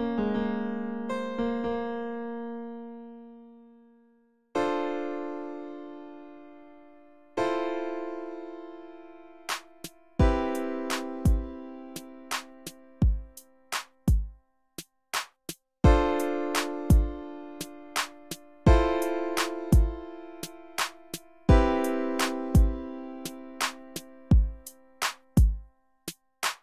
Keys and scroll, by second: 4.2 space, 4.9 space, 5.2 F5, 14.3 F1, 17.4 F1, 19.6 F1.